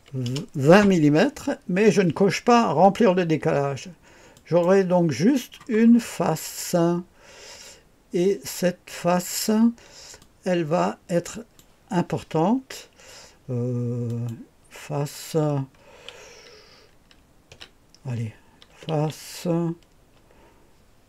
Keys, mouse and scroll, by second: 0.2 KP_0, 4.3 click, 5.7-6.8 scroll down 2, 10.2-11.6 drag, 14.1 click, 14.5 click, 17.5 F2, 18.7-19.0 typing.